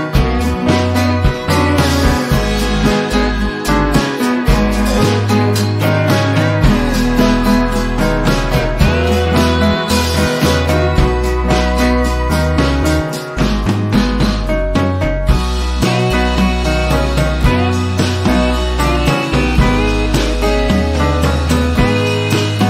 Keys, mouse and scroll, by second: 0.0 v, 0.8 click, 1.4 ctrl+c, 1.8 click, 2.2 ctrl+shift+v, 3.7 click, 8.8 ctrl+z, 10.2-11.4 drag, 21.0 r.